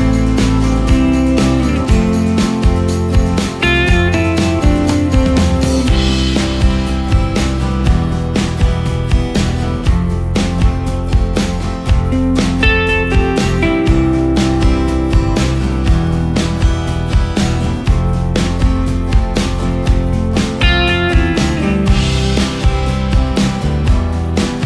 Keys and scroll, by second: 1.4 space, 2.7 ctrl+i, 5.7 ctrl+space, 15.2 ctrl+space, 18.7 ctrl+space, 20.0 ctrl+space, 22.1 ctrl+space, 23.7 ctrl+space.